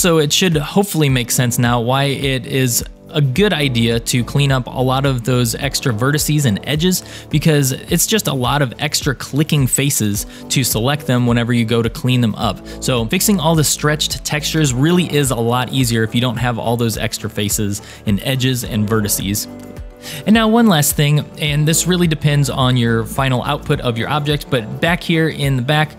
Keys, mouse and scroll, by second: 0.6 click, 1.1 shift+click, 1.9 shift+click, 2.6 shift+click, 4.2 shift+click, 5.3 shift+click, 6.0 shift+click, 7.5 shift+click, 8.2 shift+click, 8.9 shift+click, 9.7 shift+click, 13.0 middle click, 16.2-19.8 middle drag, 21.2-23.9 middle drag, 24.1-24.9 scroll up 3, 24.9 shift+middle click, 25.5-25.9 middle drag.